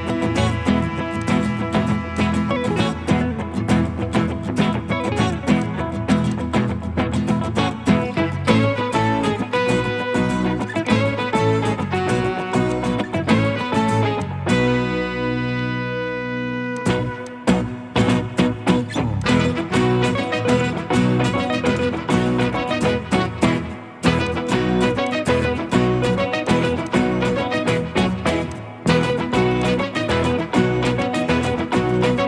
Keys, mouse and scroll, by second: 7.1 middle click, 7.2 scroll up 1, 15.3 Escape, 23.0 Escape, 23.2 Escape, 25.0 ctrl+click, 26.8 double click, 29.6 ctrl+click.